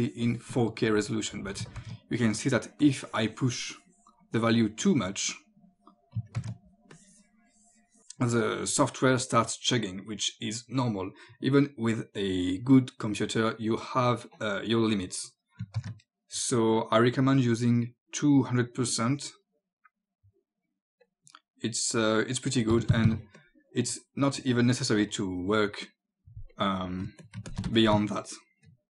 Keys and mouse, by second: 1.8 ctrl+z, 2.8 click, 6.4 ctrl+z, 6.9 click, 10.8 click, 15.8 ctrl+z, 17.4 click, 18.9 click, 21.0 click, 22.8 KP_2, 23.4 click, 26.5 click, 27.1 space, 27.2 click, 27.5 ctrl+click, 28.8 click.